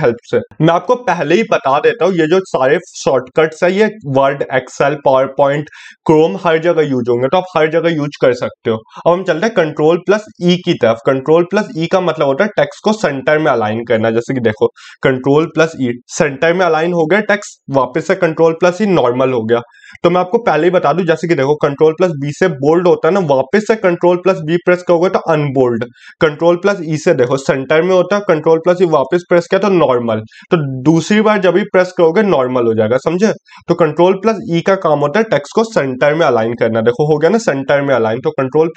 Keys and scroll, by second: 8.7 ctrl+e.